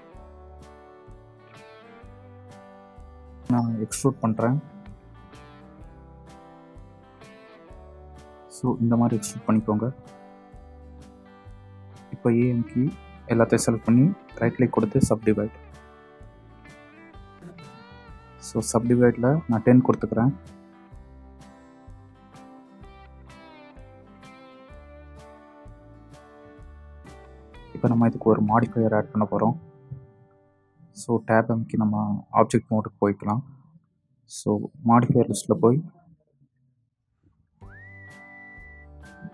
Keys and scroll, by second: 11.0 a, 17.8 KP_1, 17.9 KP_0, 22.8 Return, 24.8 ,, 29.9 Tab.